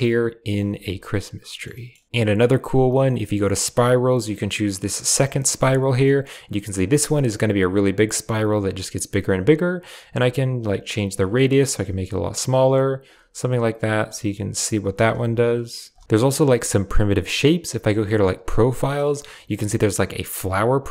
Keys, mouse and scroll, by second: 0.0 Tab, 0.2 click, 0.6 g, 1.1-1.5 drag, 1.3 shift+right click, 1.6 click, 1.6 right click, 2.0 x, 2.0 shift+a, 5.9 middle click, 7.1 click, 10.7 shift+click, 11.4-13.0 shift+middle drag, 15.0 Tab, 15.8 typing.